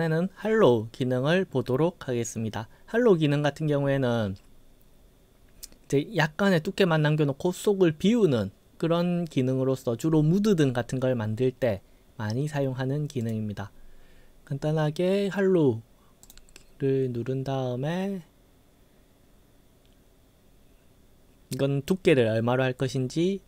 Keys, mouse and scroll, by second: 13.2 click, 16.3 click.